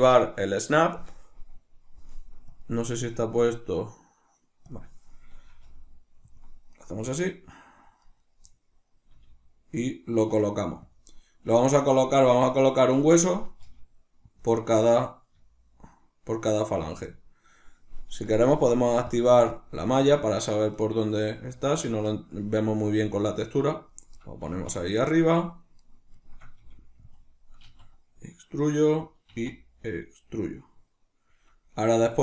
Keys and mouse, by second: 5.5 g, 6.4 click, 6.7 right click, 6.9 g, 8.1 right click, 8.2 right click, 9.1-10.9 middle drag, 9.1 g, 10.9 click, 13.1 right click, 13.6 g, 14.4 click, 14.8 right click, 15.3 g, 16.9 click, 20.7 right click, 21.2 g, 21.9 click, 22.1 shift+middle click, 22.8 right click, 22.9 g, 23.9 click, 24.5-25.8 shift+middle drag, 25.8 right click, 26.3 shift+middle click, 26.6 g, 27.2 click, 27.7 e, 29.1 click, 29.3 e, 30.5 click.